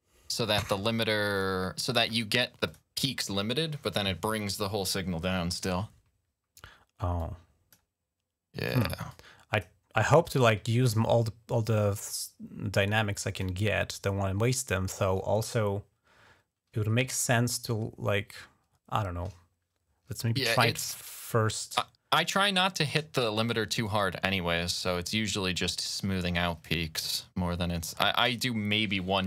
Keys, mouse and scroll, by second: 1.2 click, 2.5 click, 2.7 click, 5.4 click, 7.0 click, 8.9 click, 10.1 click, 20.6 d, 21.0 click, 22.5-28.1 drag, 28.2 ctrl+click, 28.3-28.9 ctrl+scroll down 2.